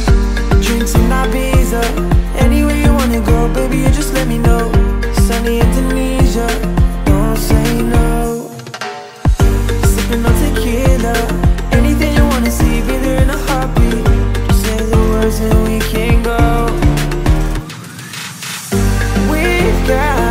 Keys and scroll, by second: 3.5 Return, 7.9 Down, 8.8 Left, 11.2 Down.